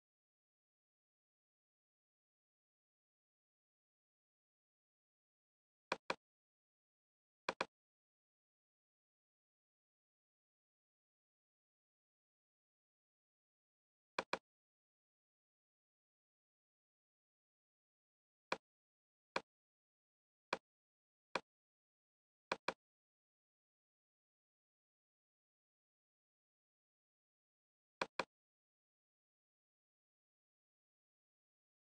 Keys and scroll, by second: 0.0-3.4 typing, 4.5 ., 12.4 ctrl+j, 15.6 ctrl+space, 24.6 alt+`, 26.7 alt+`, 30.6 ctrl+space.